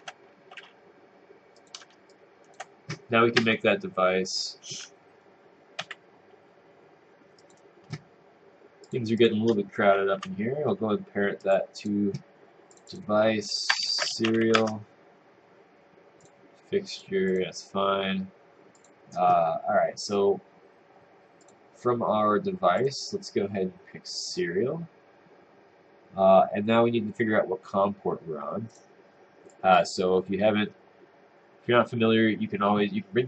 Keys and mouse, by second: 0.3-1.1 typing, 1.6 click, 2.1 click, 3.4 Tab, 5.8 w, 7.4 click, 10.2 p, 13.6-14.6 typing, 14.6 Return, 16.4 click, 19.1 click, 21.6 click.